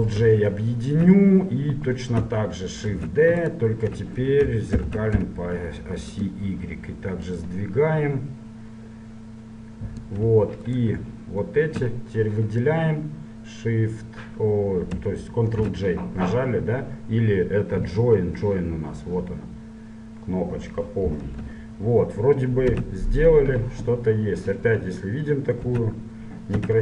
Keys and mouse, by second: 1.0-3.1 drag, 3.1 shift+d, 4.9 ctrl+m, 7.5-9.4 drag, 10.9-12.7 right drag, 15.7 ctrl+j, 19.0-20.6 drag, 21.5 click, 21.7 KP_1, 22.9 z, 25.9 Tab, 26.7 a.